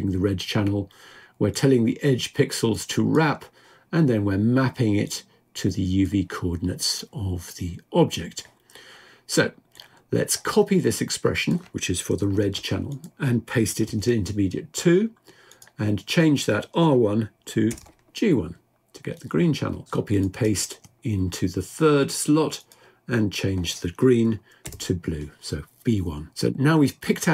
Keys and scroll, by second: 15.8 typing, 23.4 typing.